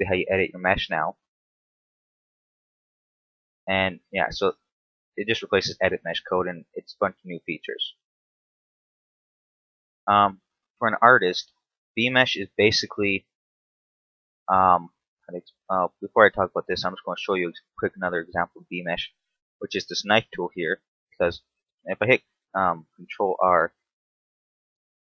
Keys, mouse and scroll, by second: 0.1 alt+right click, 0.7 alt+shift+right click, 1.4 f, 1.7 middle click, 2.7 alt+right click, 3.1 alt+shift+right click, 3.8 f, 4.6 KP_7, 5.2 a, 6.2 ctrl+r, 7.3 right click, 7.9 scroll down 1, 8.3 middle click, 10.0 scroll down 2, 11.9 scroll down 2, 12.3-13.1 scroll up 2, 13.1 KP_7, 16.6 z, 17.6 shift+middle click, 18.0 scroll up 1, 19.5 k, 20.9 right click, 21.7 ctrl+e, 23.2 ctrl+r.